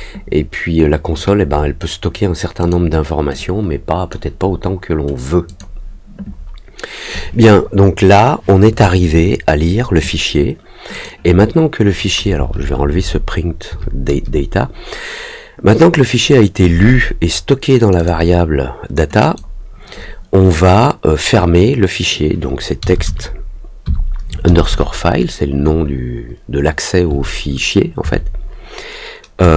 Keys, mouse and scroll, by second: 2.5 click, 3.3 click, 5.4 click, 10.9 click, 17.7 click, 17.9 click, 19.1 click.